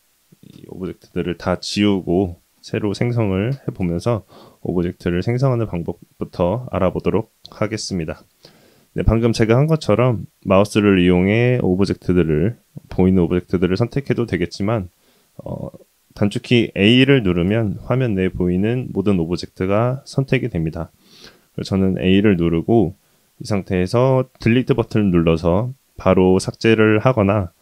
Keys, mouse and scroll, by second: 5.0 click, 8.9-10.2 drag, 11.4 click, 14.5 click, 16.5 a, 24.8 Delete, 27.4 ctrl+z.